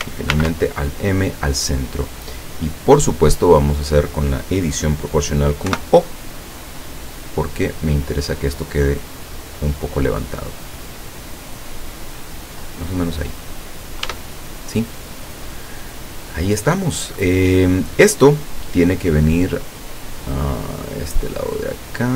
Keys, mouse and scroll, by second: 0.4 alt+m, 1.0 click, 2.5 scroll down 2, 2.9 middle click, 3.7-4.2 scroll up 2, 5.7 o, 6.7 click, 7.4-7.9 scroll down 2, 8.0-8.7 scroll down 4, 9.7 scroll down 2, 13.0 scroll down 2, 14.1 Tab, 14.7 scroll down 2, 15.0 middle click, 15.3 middle click, 16.1 scroll down 2, 17.3-18.8 middle drag, 20.4-22.1 drag.